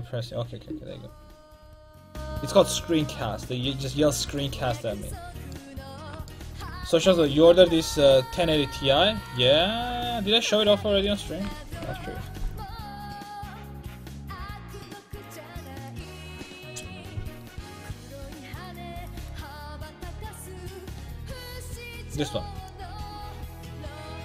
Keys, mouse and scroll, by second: 5.5 middle click.